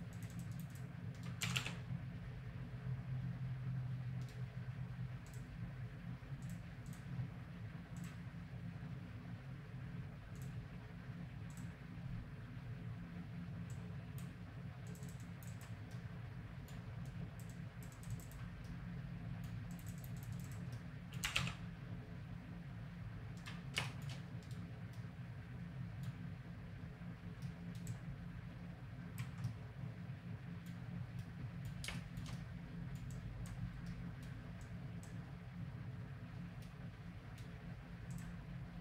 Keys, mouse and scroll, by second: 1.4 r, 5.3-8.6 drag, 10.4-12.3 drag, 13.7-22.1 drag, 15.9 middle click, 18.6 middle click, 21.2 r, 24.4-25.5 right drag, 25.5 click, 26.1 middle click, 27.9-29.2 drag, 29.5 click, 29.6 middle click, 31.2 middle click, 33.1-36.5 drag, 36.6-38.4 middle drag, 38.1-38.8 drag.